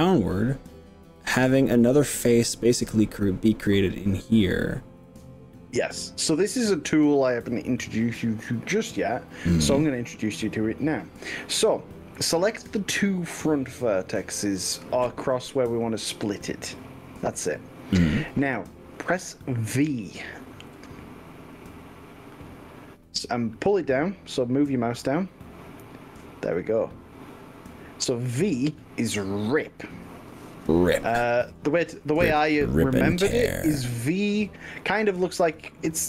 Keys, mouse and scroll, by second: 14.5 click, 15.7 shift+click, 20.8 scroll down 1, 35.4 click.